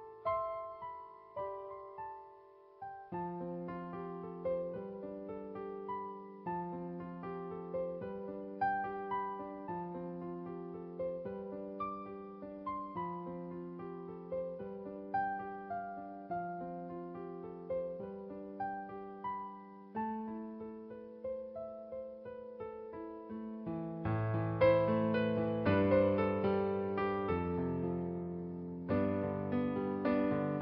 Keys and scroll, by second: 0.9 space, 3.1 space, 3.7 space, 4.9-7.6 typing, 8.9 space, 9.9 space, 10.3 space, 11.1 space, 12.3-13.0 typing, 14.7 space, 16.2 space, 19.2 space, 20.4 space, 22.3 space, 23.9 ctrl+z, 25.3 ctrl+z, 26.2 space, 27.4-30.6 typing.